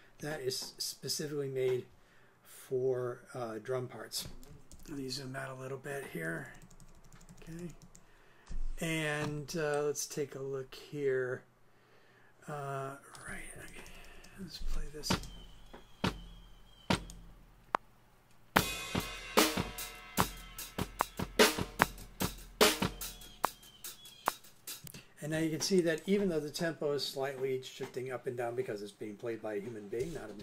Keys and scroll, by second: 4.7 super+Left, 6.3 super+Right, 13.7 super+Left, 15.1 super+space, 24.8 space.